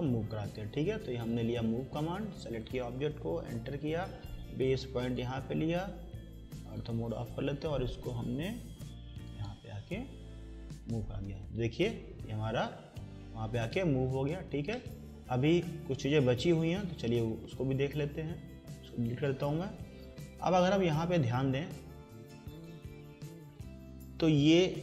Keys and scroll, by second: 3.3 Return, 18.9 Delete.